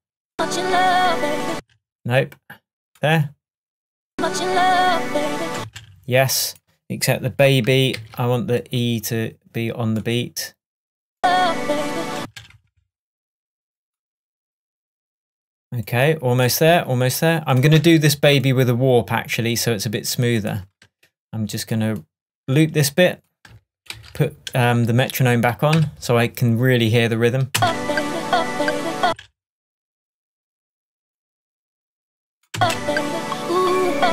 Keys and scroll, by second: 1.6 space, 5.6 space, 8.0 super+e, 12.2 space, 17.8 BackSpace, 24.0 super+l, 25.8 k, 27.6 space, 29.1 space, 32.6 space.